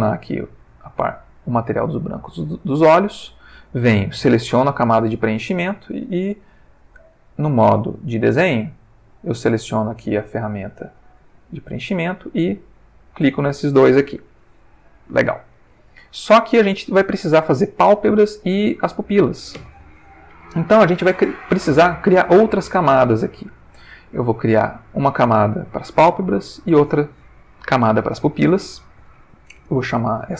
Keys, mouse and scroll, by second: 1.0 click, 3.1 click, 4.5 click, 7.1 click, 8.0 click, 9.7 click, 11.5 click, 12.6 click, 24.4 click, 26.3 click, 28.6 click, 30.2-30.3 typing.